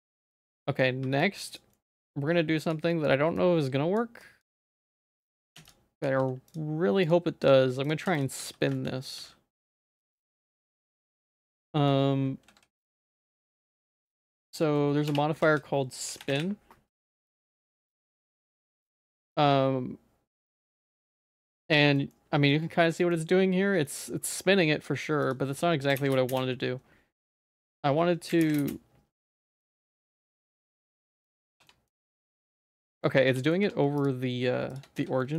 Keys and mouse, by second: 0.0 middle click, 0.4 z, 0.7 middle click, 1.0 1, 1.3 click, 1.8 middle click, 2.2 shift+click, 2.9 shift+middle click, 3.4 shift+click, 4.2 shift+click, 4.8 x, 5.6 x, 6.1 x, 7.5 click, 7.9 shift+click, 8.1 x, 8.4 a, 8.7 shift+middle click, 9.3 ctrl+s, 10.5 shift+middle click, 10.9 ctrl+s, 11.6 shift+middle click, 12.5 ctrl+s, 13.2 middle click, 15.2 F3, 18.8 middle click, 19.4-20.9 middle drag, 21.8 shift+z, 21.9 middle click, 22.3 middle click, 23.9 middle click, 25.2-26.4 drag, 27.6-28.7 drag, 29.5 middle click, 30.0 shift+middle click, 30.8 ctrl+z, 31.4 Tab, 31.6 Tab, 31.7 middle click, 32.0 Tab, 32.2 Tab, 32.4 1, 32.9 middle click, 33.3 Tab, 33.4 middle click, 33.6 Tab, 35.0 z, 35.2 middle click.